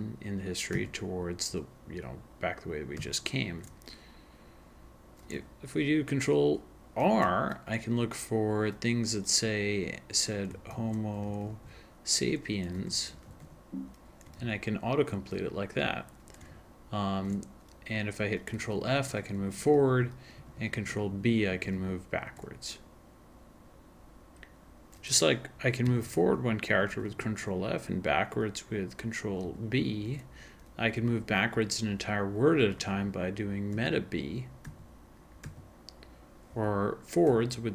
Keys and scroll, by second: 0.7 ctrl+n, 3.0 ctrl+n, 7.0 ctrl+r, 10.5-13.9 typing, 14.4 ctrl+a, 16.5 ctrl+f, 16.8 ctrl+f, 17.0 ctrl+f, 17.1 ctrl+f, 19.5 ctrl+f, 19.8 ctrl+f, 20.5 ctrl+b, 20.8 ctrl+b, 21.0 ctrl+b, 21.2 ctrl+b, 21.6 ctrl+b, 22.9 ctrl+b, 25.8 ctrl+f, 26.0 ctrl+f, 26.2 ctrl+f, 26.9 ctrl+f, 27.1 ctrl+f, 29.4 ctrl+b, 29.8 ctrl+b, 33.7 alt+b, 34.8 alt+b, 36.1 alt+b, 37.3 alt+f.